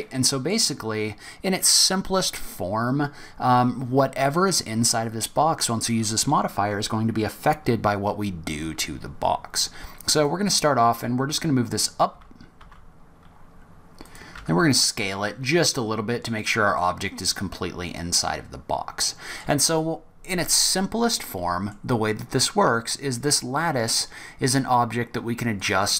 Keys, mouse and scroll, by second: 4.5-5.2 scroll down 1, 5.2-5.7 scroll down 1, 10.1 click, 11.2 g, 14.8 s, 16.8 middle click, 20.0-20.4 scroll down 3, 21.0 middle click, 22.1 scroll up 2, 24.5-25.6 scroll up 1, 25.6 click.